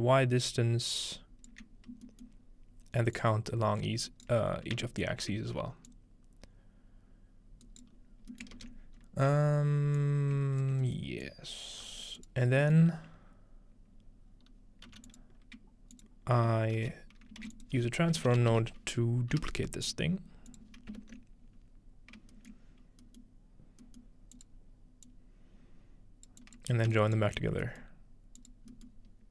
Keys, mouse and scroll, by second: 2.3-4.1 shift+middle drag, 3.2-4.3 drag, 4.1 right click, 4.5-5.0 scroll down 1, 5.0-5.9 shift+middle drag, 5.9-8.3 shift+drag, 7.7 right click, 8.3-9.8 ctrl+middle drag, 8.6-9.8 ctrl+drag, 8.6-9.8 ctrl+right drag, 8.8 scroll down 1, 9.0-9.3 scroll up 2, 10.0-14.1 drag, 10.7 scroll up 1, 11.0-12.6 ctrl+middle drag, 11.9 g, 14.9 g, 15.1-19.2 drag, 16.8-19.0 typing, 19.3 Return, 20.5 click, 21.0 ctrl+space, 21.6-23.8 scroll up 1, 22.5-23.8 middle drag, 24.4 click, 25.1-26.3 drag, 26.4 click, 27.0 ctrl+shift+click, 27.0 ctrl+shift+right click, 27.2-28.9 ctrl+shift+middle drag, 28.4 click, 28.9-29.3 drag.